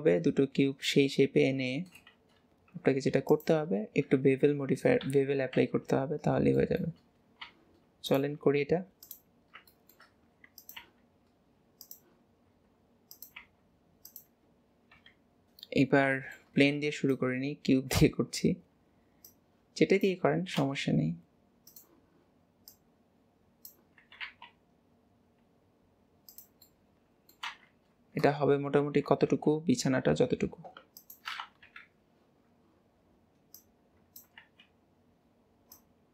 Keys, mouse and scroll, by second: 0.4-0.9 scroll down 1, 0.9-1.5 shift+middle drag, 1.5-2.2 scroll down 1, 2.2 shift+a, 5.1 KP_1, 5.7 alt+z, 6.2 scroll up 1, 6.3-6.6 scroll down 1, 6.6 shift+middle click, 7.1-7.5 scroll up 2, 7.5 g, 9.4-9.8 scroll up 3, 9.8 shift+middle click, 10.3 s, 15.0 KP_7, 15.9-16.2 scroll down 2, 16.2-17.2 shift+middle drag, 17.2 click, 18.3-19.3 scroll up 2, 19.3 click, 22.8 click, 24.1 s, 26.8-27.5 middle drag, 27.5 alt+z, 31.7 KP_7, 33.6 click, 34.5 alt+z, 35.8 click.